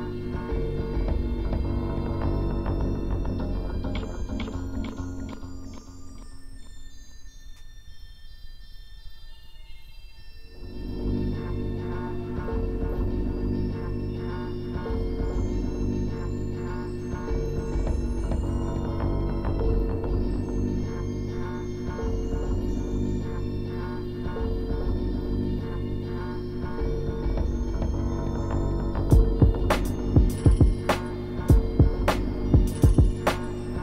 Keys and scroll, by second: 0.0-0.5 scroll down 2, 0.5 ctrl+z, 1.2 scroll down 1, 4.0 scroll up 1, 4.7 scroll up 1, 10.8 ctrl+z, 12.5 ctrl+z, 22.1 ctrl+z, 26.9 scroll down 1, 30.0 scroll up 1.